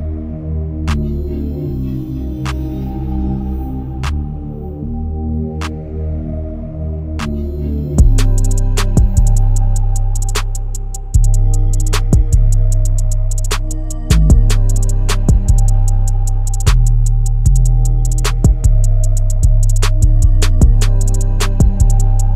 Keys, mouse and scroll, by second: 0.5 click, 1.4 ctrl+r, 2.7 click, 3.3 click, 3.7 click, 4.3 s, 6.5-7.7 middle drag, 7.7 click, 8.2 e, 10.7 s, 12.8 click, 13.1 shift+click, 13.4 shift+click, 13.6 shift+click, 14.1 alt+middle click, 14.8 e, 16.5 middle click, 17.0 click, 17.6 shift+click, 17.9 shift+click, 18.6 e, 22.1 g.